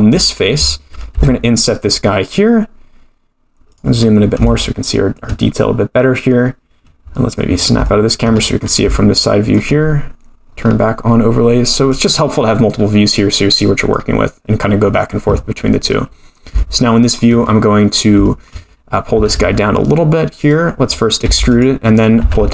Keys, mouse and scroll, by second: 1.1 i, 4.0-4.4 scroll up 5, 4.5 shift+middle click, 7.1 middle click, 7.5 scroll down 5, 7.8 shift+middle click, 8.3-8.9 scroll up 8, 8.9 shift+middle click, 10.5-10.8 scroll down 2, 11.9 click, 12.4-13.7 scroll up 5, 13.2 middle click, 16.3-17.1 scroll up 2, 17.1 shift+middle click, 17.4-17.8 scroll up 1, 17.8 scroll down 1, 18.2 shift+middle click, 19.1 g, 21.2 e, 22.2 g.